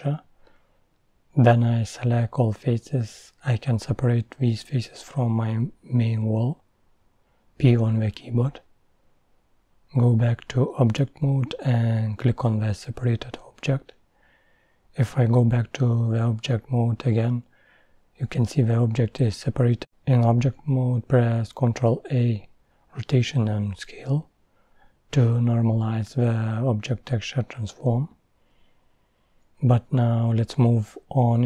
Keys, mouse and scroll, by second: 1.2 shift+click, 2.0-3.7 middle drag, 3.7-6.2 drag, 6.2 p, 8.2-9.6 middle drag, 9.6-11.3 drag, 15.0-18.0 drag, 18.4 Tab, 21.7 ctrl+a, 27.3-30.3 drag.